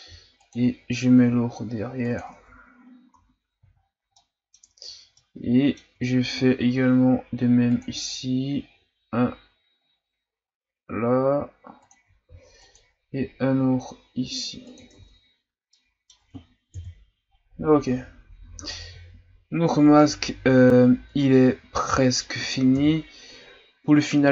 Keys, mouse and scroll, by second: 0.0 ctrl+r, 2.4 Tab, 2.8 scroll down 2, 3.1 a, 3.8-4.2 shift+scroll up 4, 4.2 middle click, 4.8 Tab, 5.2-6.3 middle drag, 6.3 ctrl+r, 12.2 ctrl+r, 15.1 Tab, 15.3-15.7 scroll down 2, 15.7-16.7 middle drag, 16.7 KP_1, 17.9-18.7 scroll up 2, 18.7-20.0 scroll down 1, 20.0-22.7 middle drag, 22.7 KP_1.